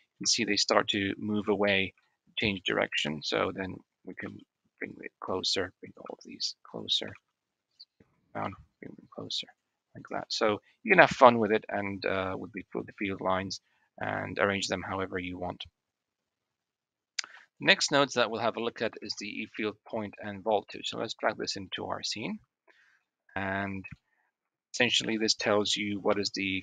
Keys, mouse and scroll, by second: 0.0 shift+middle click, 1.8 shift+middle click, 3.0 Tab, 4.1 g, 5.4 click, 6.0 g, 6.9 s, 8.2 g, 9.8 shift+middle click, 10.0 shift+drag, 10.6-12.2 middle drag, 12.8-13.3 middle drag, 14.4-15.0 middle drag, 17.6-18.2 shift+middle drag, 18.6 a, 18.9 x, 22.9-23.5 shift+middle drag, 23.8-24.2 shift+middle drag, 25.1 shift+middle click, 26.1 g.